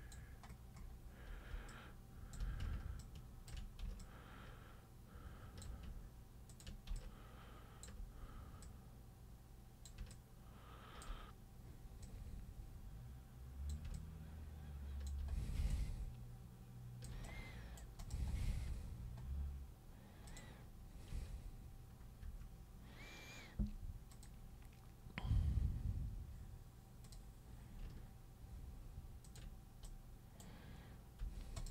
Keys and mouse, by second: 1.7 alt+super+click, 3.0-3.5 ctrl+shift+super+drag, 4.0-5.6 alt+super+drag, 6.5 ctrl+super+click, 6.9 alt+super+click, 8.6-9.8 super+drag, 10.1 alt+super+click, 12.0 super+click, 13.9-15.0 alt+super+drag, 15.7-17.1 alt+super+drag, 17.2 super+right click, 18.0 super+click, 20.3 super+click, 21.1 super+3, 22.2 1, 24.1 click, 27.0 click, 29.2 ctrl+click, 29.8 right click, 31.2 3, 31.6 click.